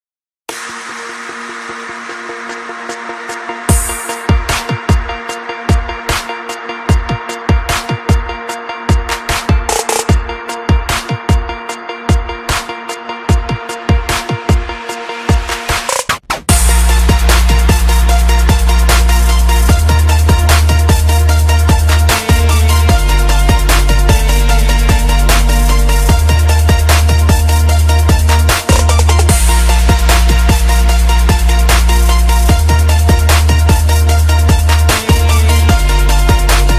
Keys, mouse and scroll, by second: 0.5 KP_8, 0.7 KP_0, 1.1 click, 1.3 KP_8, 1.5 KP_0, 2.1 Return, 2.4 click, 5.6 F10, 5.8 right click, 6.5-10.7 typing, 8.0 Return, 11.9 click, 15.8 typing, 16.4 Tab, 17.1 click, 19.9 BackSpace, 22.9 click, 24.9-26.4 typing, 27.0 click, 30.2-31.6 typing, 32.2 click, 34.4-36.7 typing.